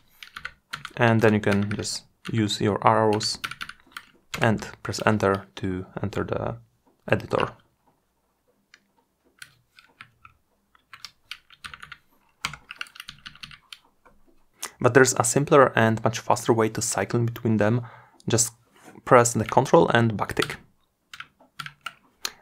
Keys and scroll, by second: 18.7 ctrl+`.